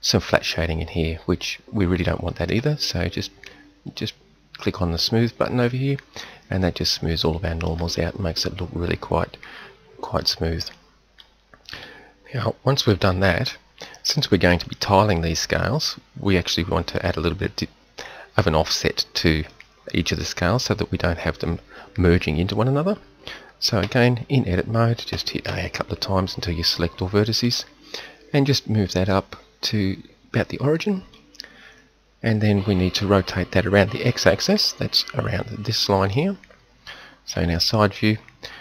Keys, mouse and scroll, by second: 10.2-10.8 middle drag, 11.7 KP_7, 13.1 KP_3, 23.8 Tab, 25.1 a, 25.5 a, 28.5-31.1 drag, 34.5 KP_7, 37.3 KP_3.